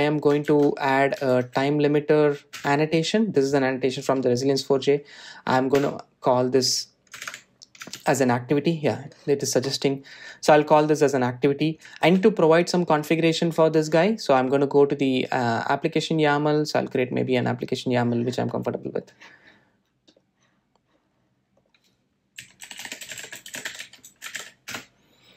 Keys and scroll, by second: 4.0 Return, 8.7 super+z, 9.2 Tab, 13.5 super+s.